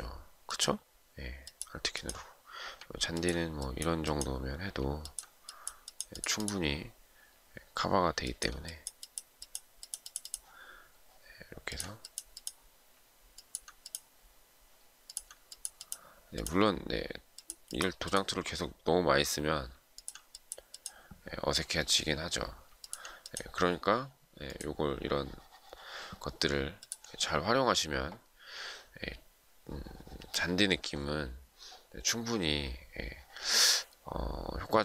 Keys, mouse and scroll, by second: 2.6 alt+click, 4.5 alt+click, 11.3 alt+click, 13.1 alt+click, 14.8 alt+click, 19.5 alt+click, 22.4 alt+click, 30.6-31.3 alt+scroll down 1, 31.3-31.7 alt+scroll up 1, 32.3 alt+scroll down 1, 33.1 alt+scroll up 1, 34.6-34.8 alt+scroll down 1.